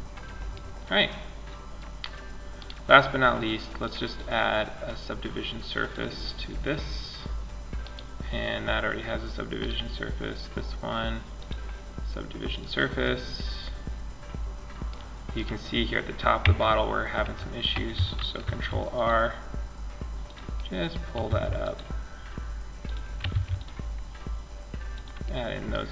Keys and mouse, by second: 1.8-4.6 right drag, 3.0-4.9 drag, 4.9 middle click, 7.0-10.6 right drag, 10.6-12.4 drag, 12.4 middle click, 15.6 Tab, 17.6 ctrl+r, 20.4 ctrl+r, 22.5 ctrl+r.